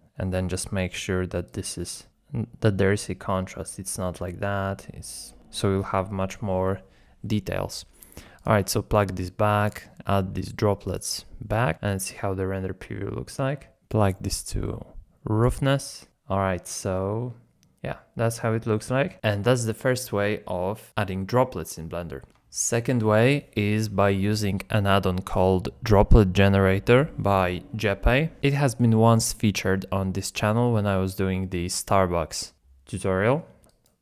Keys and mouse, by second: 0.0 click, 1.5 click, 3.1-6.6 drag, 8.4 shift+click, 12.4 z, 14.2-15.6 drag, 19.1 z, 19.5 z, 28.4-34.0 drag.